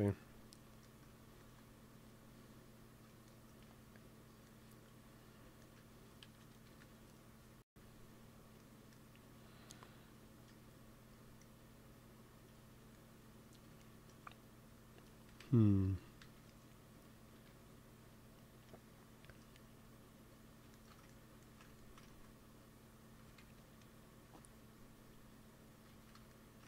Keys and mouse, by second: 1.3 ctrl+s, 6.3 KP_3, 6.6 KP_1, 15.2 KP_1, 15.7 KP_0, 16.1 KP_Decimal, 17.3 KP_3, 23.1 g, 23.3 f, 24.1 f, 24.7-26.5 drag, 25.9 ctrl+z.